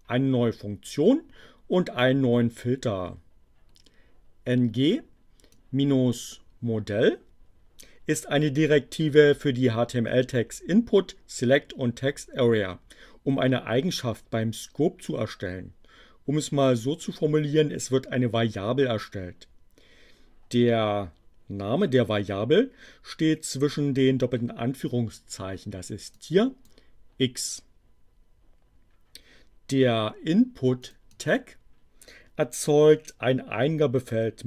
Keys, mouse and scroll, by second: 5.5-8.0 drag, 26.1 click, 30.8 click.